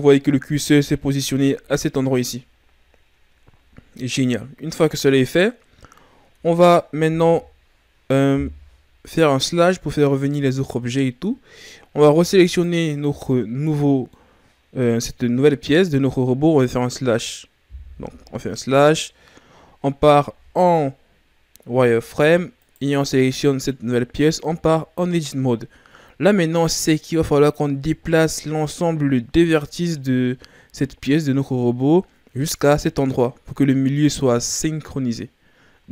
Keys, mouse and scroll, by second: 1.5 KP_3, 2.8-3.7 shift+scroll up 5, 3.7-4.2 scroll up 4, 6.2 Tab, 7.2 KP_Divide, 8.5 z, 9.5-12.4 middle drag, 12.4 shift+right click, 13.7-16.7 middle drag, 16.7 KP_3, 18.4 KP_Divide, 19.8-21.2 scroll up 2, 21.2-21.8 scroll up 4, 21.8 z, 22.6 right click, 24.5 Tab, 25.2-27.7 scroll up 2, 35.8 a.